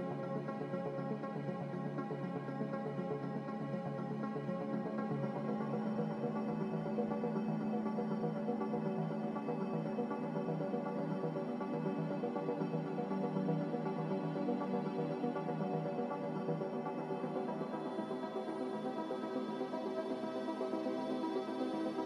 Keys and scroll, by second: 3.0 z, 4.7-5.6 typing, 11.1-11.9 typing, 13.1-14.0 typing, 15.2-16.0 typing, 17.4-20.9 typing.